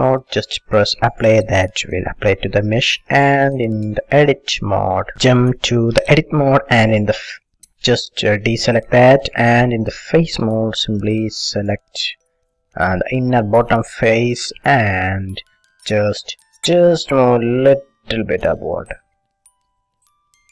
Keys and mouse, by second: 8.9 a, 12.4-13.6 drag, 13.6-15.7 middle drag, 16.6 ctrl+z, 17.8-19.6 drag.